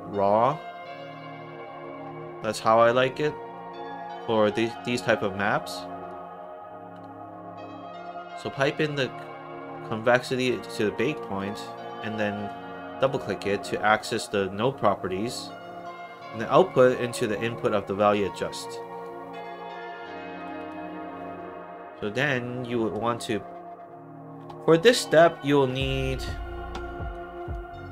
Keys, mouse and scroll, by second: 1.6 click, 3.5 middle click, 5.6 click, 8.3-10.4 drag, 10.9 click, 11.3 click, 11.4 click, 13.0 click, 13.1 click, 16.4-18.0 drag, 18.7 click, 20.3 click, 20.5 click, 24.8 click, 27.0 click.